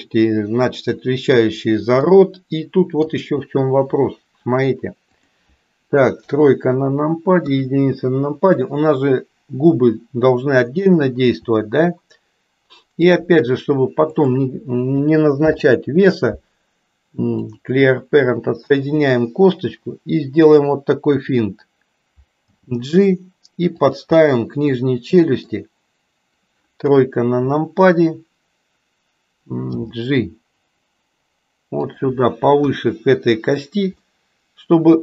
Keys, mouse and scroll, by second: 2.1-3.2 middle drag, 5.0 click, 6.2 KP_3, 11.3 e, 15.4 alt+p, 22.4 g, 24.2-25.5 middle drag, 26.8 KP_3, 29.7 g, 32.5 KP_1, 34.1-35.0 middle drag.